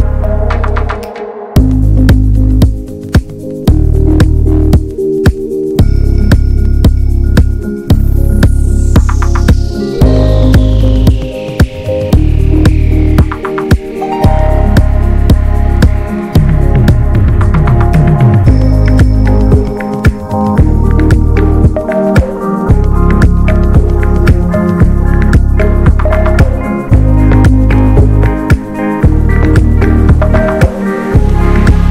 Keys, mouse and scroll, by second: 2.4-3.5 scroll up 6, 3.0 middle click, 3.5 alt+z, 3.8 middle click, 4.0 alt+z, 4.3 shift+middle click, 4.4 scroll up 1, 4.7 middle click, 5.6 click, 5.9 middle click, 6.1 scroll up 1, 6.3-8.0 shift+middle drag, 8.0 click, 8.3 middle click, 8.4-9.4 scroll up 2, 8.6 shift+middle click, 9.4 click, 9.7 alt+shift+click, 10.1-12.1 middle drag, 12.1 scroll down 2, 12.4 middle click, 12.7 scroll up 1, 13.0 middle click, 13.9 click, 14.2 alt+shift+click, 14.5 middle click, 15.2 alt+shift+click, 15.5 scroll down 3, 15.8 middle click, 16.3-17.6 scroll up 1, 17.6 shift+click, 17.9 shift+click, 18.1 middle click, 18.3 scroll up 1, 18.6-19.6 shift+middle drag, 19.6 shift+click, 20.0 shift+click, 20.6 shift+click, 20.9 shift+click, 21.5 shift+click, 22.8 right click, 23.1 a, 23.6 a, 23.9 right click, 24.4 scroll down 2, 24.6 middle click, 25.0 scroll up 1, 25.8 click, 26.1-27.9 middle drag, 27.9-28.4 scroll down 2, 28.4-30.1 right drag, 30.1-31.9 shift+middle drag.